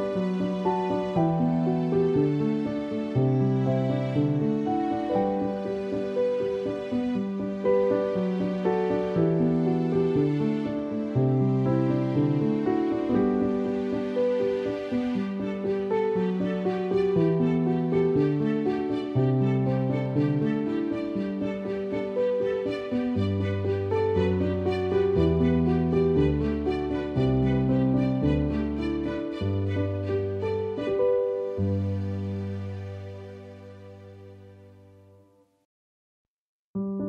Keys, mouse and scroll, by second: 0.0 ctrl+-, 0.9 ctrl+=, 1.1 space, 1.3 click, 1.4 space, 1.9 alt+click, 2.8 alt+click, 4.1 alt+click, 5.8-6.6 typing, 6.1 alt+click, 7.1 alt+click, 8.6-9.4 typing, 8.8 alt+click, 9.8 alt+click, 10.9 alt+click, 12.6 alt+click, 14.1 alt+click, 15.6 ctrl+z, 15.9 alt+click, 17.4 space, 17.6 click, 22.9 space, 23.1 click, 23.4 space, 23.5 space, 24.8 alt+click, 28.4 alt+click, 29.4 alt+click, 30.6 space, 30.8 click, 30.9 space, 31.4 alt+click, 33.2 alt+click, 34.8 alt+click, 36.5 alt+click.